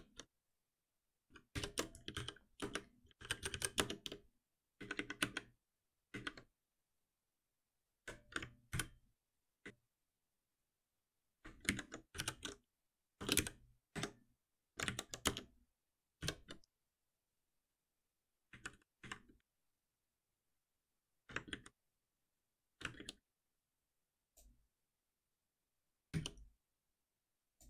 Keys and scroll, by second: 1.5 shift+F6, 8.7 ctrl+alt+b, 13.3 Return, 13.9 Escape, 14.8 alt+Delete, 16.2 shift+F10, 21.5 ctrl+shift+Down, 23.0 ctrl+shift+Down, 26.1 alt+F7.